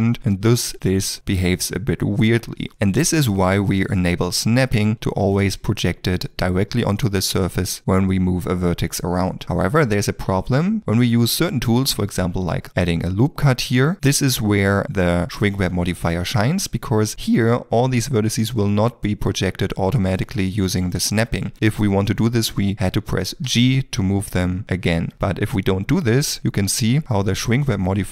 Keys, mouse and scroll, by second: 4.6 g, 6.8 middle click, 9.4 ctrl+middle click, 9.6 shift+middle click, 12.2 ctrl+r, 13.8 middle click, 19.5 middle click, 23.5 g, 25.1 ctrl+z.